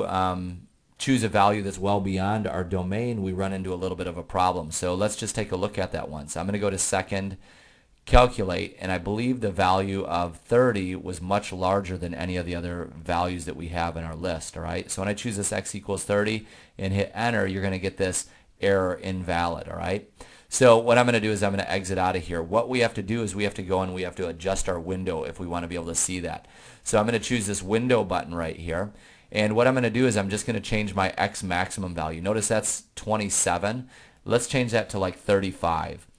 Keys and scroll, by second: 10.6 Return, 12.9 3, 13.3 0, 16.5 Return, 21.3 Return, 30.2 Down, 35.5 2, 35.8 5.